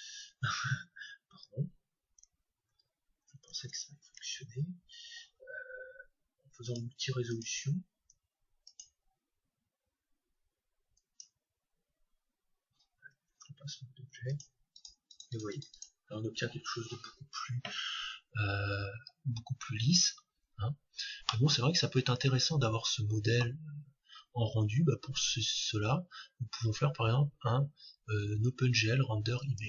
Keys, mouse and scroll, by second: 2.9 ctrl+z, 4.2 Tab, 6.7-9.2 drag, 11.0-12.9 drag, 14.2-18.8 drag, 20.4-21.2 scroll down 1, 21.2-21.8 scroll down 1, 21.8-23.6 middle drag, 25.7-27.4 drag.